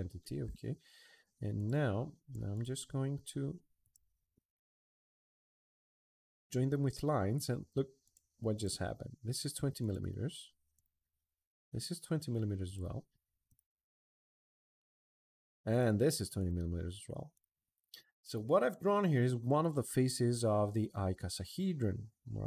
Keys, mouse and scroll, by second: 1.3 click, 2.3 click, 3.6 click, 5.0 click, 5.7 Escape, 6.1 Escape, 6.4-7.7 middle drag, 7.8 click, 8.3 click, 9.6 click, 10.5 click, 12.4 click, 13.2 click, 13.9 click, 15.5 click, 16.1 click, 17.1 click.